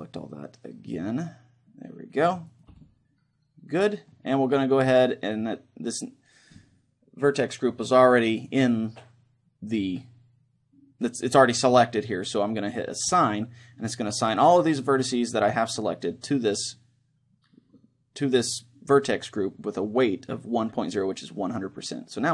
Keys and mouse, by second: 2.6-4.4 right drag, 2.9-4.6 middle drag, 12.7-14.7 drag.